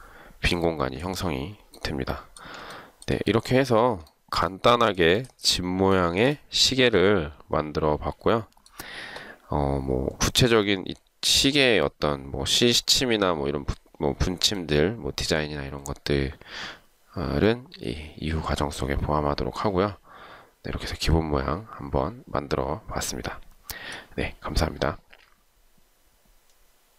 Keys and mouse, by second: 2.9 shift+right click, 4.3 shift+right click, 6.1 shift+right click.